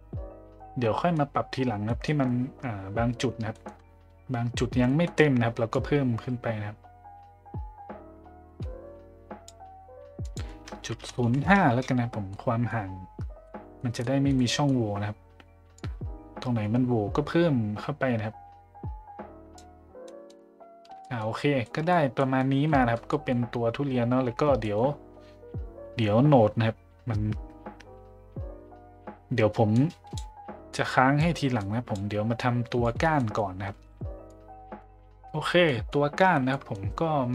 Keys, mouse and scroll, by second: 0.9 middle drag, 1.8 middle click, 3.6 middle click, 4.8 middle click, 5.8-9.5 drag, 10.3-11.8 drag, 12.3-12.7 middle drag, 13.4-13.8 middle drag, 14.0 middle drag, 14.3-14.6 middle drag, 15.7-19.6 drag, 20.0 middle drag, 21.0 middle drag, 21.6 middle drag, 22.2 middle drag, 22.6 middle drag, 23.1 middle click, 24.6 middle click, 29.8 click, 30.7-31.2 drag, 31.6-32.0 drag, 32.4 click, 33.2 middle click, 34.3 click, 35.7 middle click, 36.5 middle click.